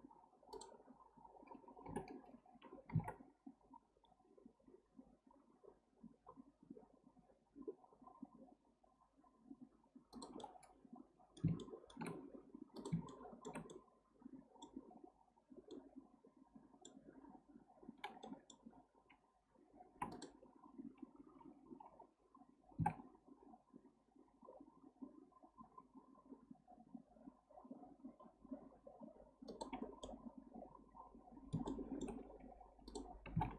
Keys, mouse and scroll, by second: 0.5 click, 1.9 o, 10.4-12.8 middle drag, 12.8 drag, 13.1-19.9 shift+middle drag, 19.9 3, 20.1 click, 22.7 g, 29.8 scroll down 1, 30.1-32.9 middle drag, 32.9 click, 33.3 g.